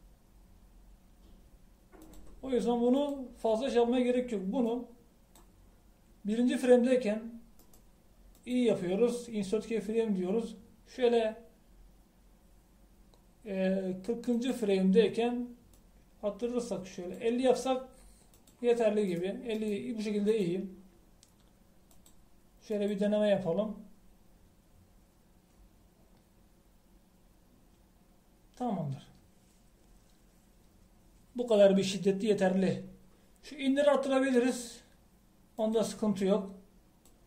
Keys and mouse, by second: 3.3-7.9 drag, 8.6-11.0 middle drag, 15.4-20.6 drag, 20.6-23.0 middle drag, 23.0-25.6 drag, 35.6-36.8 drag.